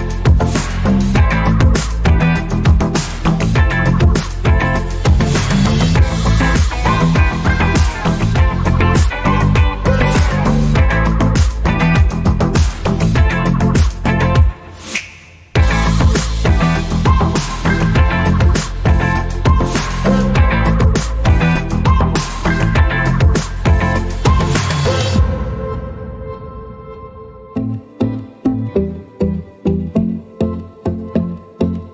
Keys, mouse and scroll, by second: 1.1 click, 4.4 scroll down 1, 5.8 click, 7.4 scroll down 1, 8.4 scroll down 1, 8.8 scroll up 1, 10.1 click, 15.3 click, 20.5 click, 24.1-24.4 alt+scroll down 1, 24.4 alt+scroll up 1, 25.4 click, 27.0-28.1 alt+scroll down 2, 28.1 click.